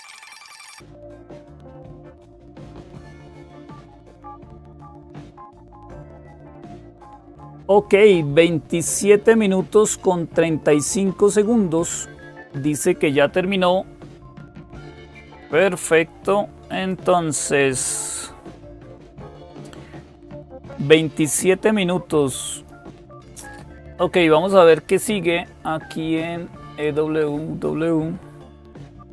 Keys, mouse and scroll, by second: 16.6-17.6 drag, 22.4 click, 26.6 click.